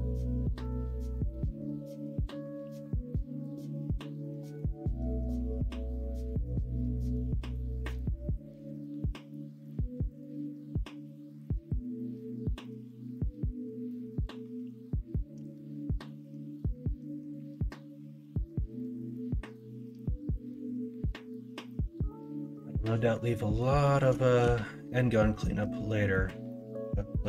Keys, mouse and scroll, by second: 0.4 scroll up 1, 0.5 middle click, 1.4 middle click, 6.9 alt+z, 7.2 middle click, 9.0 Tab, 10.3 /, 10.5-10.9 middle drag, 11.2-15.9 middle drag, 17.7-18.0 middle drag, 18.5 middle drag, 18.9 shift+middle drag, 19.5-22.3 middle drag, 22.5 shift+middle drag, 22.9 middle drag, 23.3 middle drag, 23.8 middle drag, 24.2 shift+middle drag, 24.5-25.6 middle drag, 26.1 middle drag, 26.4 middle drag.